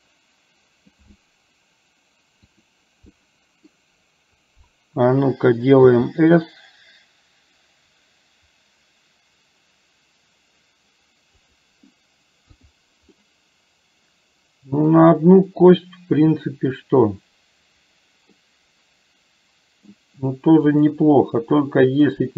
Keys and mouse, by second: 2.6 click, 3.3 middle click, 12.6 click, 13.2-14.9 middle drag, 18.4-19.9 middle drag, 20.8 click, 21.7 middle click.